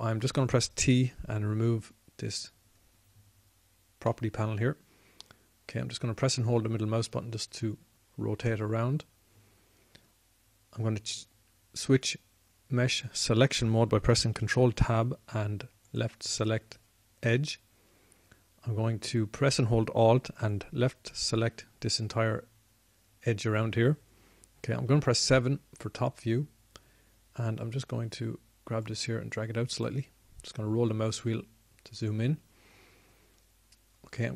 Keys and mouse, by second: 3.3 t, 6.7-7.9 middle drag, 10.0-15.3 middle drag, 16.1 ctrl+Tab, 22.1-23.6 drag, 26.7 KP_7, 30.6 click, 31.0 click.